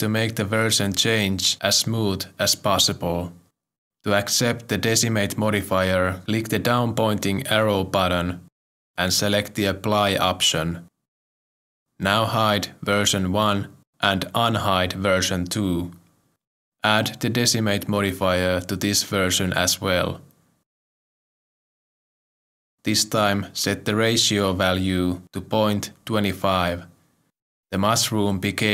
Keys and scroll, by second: 24.9 ., 26.0 2, 26.3 5, 27.4 Return.